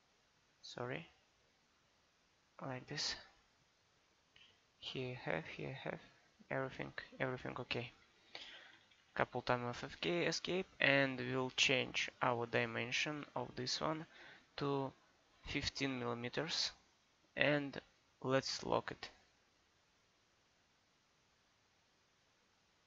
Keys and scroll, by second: 8.1 Escape, 15.8 1, 15.9 5, 16.5 Return.